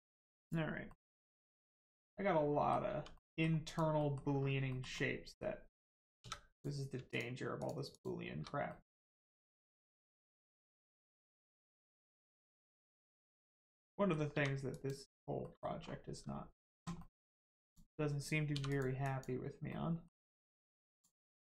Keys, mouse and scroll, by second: 0.4 click, 0.9 middle click, 2.9 2, 3.1 middle click, 3.6 click, 3.9 middle click, 4.3 scroll up 1, 4.7 shift+middle click, 4.9 middle click, 5.0 middle click, 6.2 3, 6.5 click, 7.1 shift+click, 7.5 shift+click, 8.7 middle click, 8.7 middle click, 9.7 click, 10.1 middle click, 11.5 shift+middle click, 11.9 middle click, 12.0 middle click, 12.7 scroll up 1, 13.3 click, 13.8 middle click, 14.3 2, 14.7 click, 15.4 middle click, 15.7 scroll down 1, 16.0 Tab, 16.9 middle click, 17.2 Tab, 17.6 click, 20.2 scroll up 1, 20.9 click, 21.3 middle click.